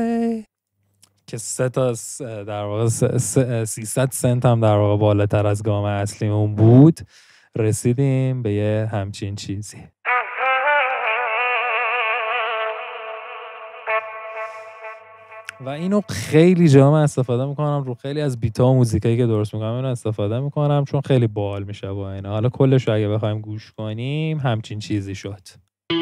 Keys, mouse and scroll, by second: 0.6 e, 10.1 scroll up 2, 10.3 scroll, 13.9 middle click, 13.9 scroll, 14.4 middle click, 14.4 scroll, 25.8 click.